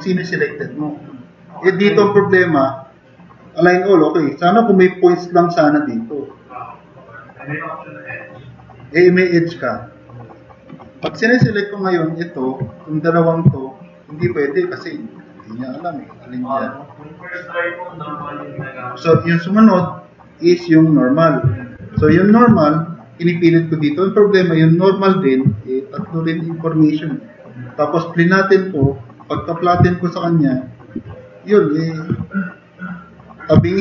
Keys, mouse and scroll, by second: 2.7 click, 4.8 click, 20.2 click, 20.8 click, 22.0 3, 31.0 t.